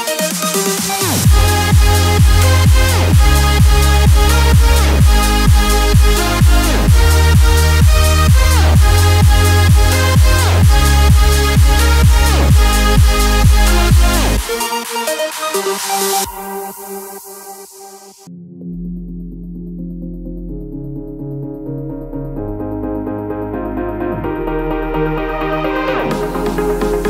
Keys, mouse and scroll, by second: 5.1 click, 6.8 t, 7.6-11.3 drag, 13.5-15.3 scroll up 1, 15.8-17.0 scroll down 1, 17.0-18.5 scroll up 1, 18.5-21.2 drag, 21.6-23.8 scroll up 1, 23.8 Return, 25.3 click.